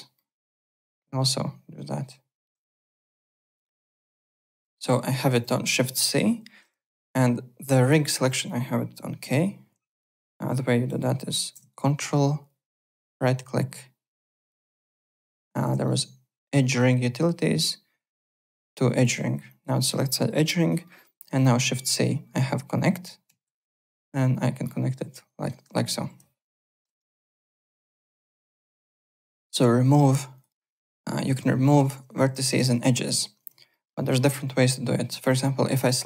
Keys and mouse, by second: 0.1 ctrl+shift+middle click, 2.7-5.6 typing, 3.0 alt+click, 3.7 click, 4.3 shift+click, 4.7 alt+middle click, 5.4 click, 6.9 alt+click, 9.2 k, 9.9 alt+click, 10.4 click, 11.0 shift+right click, 11.7 ctrl+right click, 15.8 ctrl+right click, 19.5 alt+click, 20.6 alt+click, 20.8 alt+middle click, 21.1 alt+right click, 23.3 shift+c, 24.6 middle click, 26.5 click, 26.7 KP_0, 26.8 KP_Enter, 26.8 Return, 27.4 click, 27.7 alt+middle click, 28.0 w, 28.3 alt+click, 28.5 alt+Tab, 28.8 alt+click, 30.3 alt+click, 30.9 alt+right click, 31.2 1, 31.6 alt+middle click, 31.8 alt+right click, 32.0 alt+w, 32.1 2, 32.5 alt+click, 33.0 click, 33.7 alt+middle click, 33.9 alt+right click, 34.1 alt+click, 35.7 click.